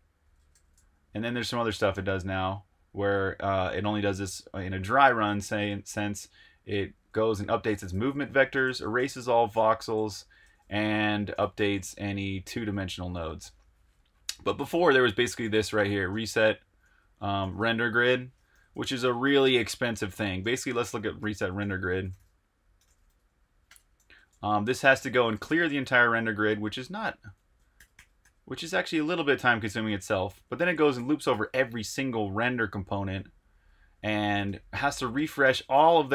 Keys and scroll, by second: 0.0-2.7 typing, 4.2 typing, 5.7-13.6 typing, 14.6-26.1 typing, 26.9 Escape, 27.2-32.7 typing, 30.0 Escape, 34.2-36.1 typing.